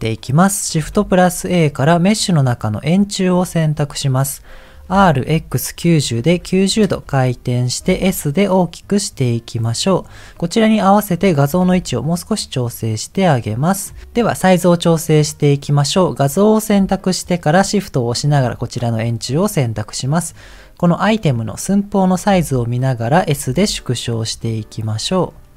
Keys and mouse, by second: 0.9 shift+a, 4.9 r, 7.8 s, 10.4 click, 11.1 click, 11.5 g, 15.0 click, 15.9 click, 17.8 shift+click, 22.3 a, 23.7 s.